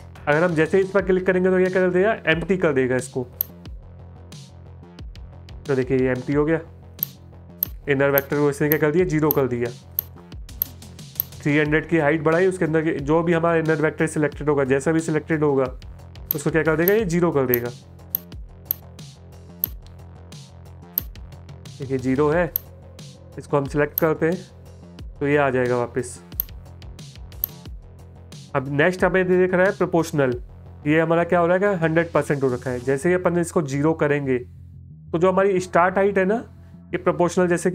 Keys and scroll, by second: 5.7 space, 25.6 space.